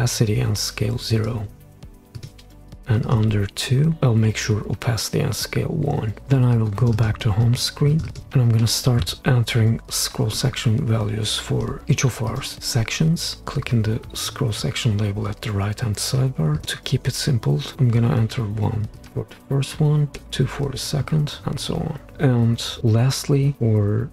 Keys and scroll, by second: 17.7 1, 20.2 2.